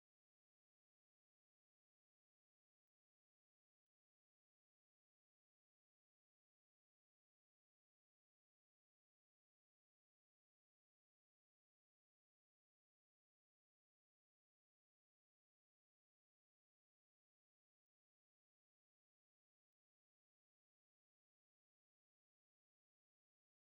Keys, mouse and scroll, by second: 0.9 middle click, 8.3-13.7 middle drag, 14.7-15.8 middle drag.